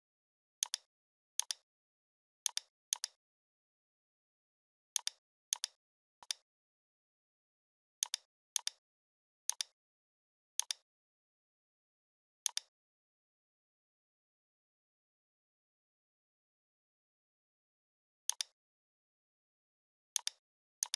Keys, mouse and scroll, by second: 0.6 click, 3.9 right click, 5.0 click, 8.0 click, 11.5 Tab, 12.5 click, 12.8-13.6 typing, 14.8-17.2 typing, 17.4 Return, 18.3-20.2 drag, 20.2 click, 20.8 click.